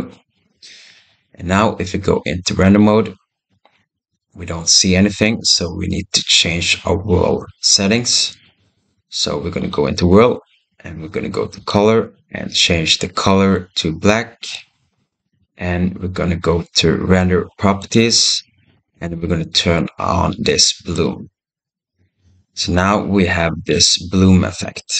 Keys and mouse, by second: 2.7 click, 11.4 click, 17.6 click, 20.8 click, 22.6 shift+middle click.